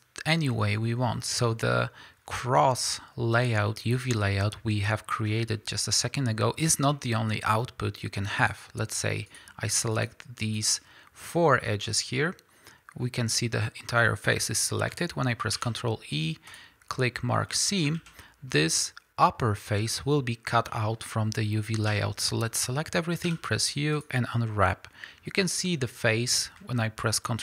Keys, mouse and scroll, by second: 0.5-8.5 middle drag, 6.0-6.6 scroll up 2, 6.6 scroll up 1, 8.5 click, 9.2 shift+click, 9.9 shift+click, 10.4 shift+click, 13.3-13.8 middle drag, 15.5 ctrl+e, 17.7-22.8 middle drag, 17.9 alt+a, 21.9 a, 23.2 u, 25.2-25.7 scroll up 1.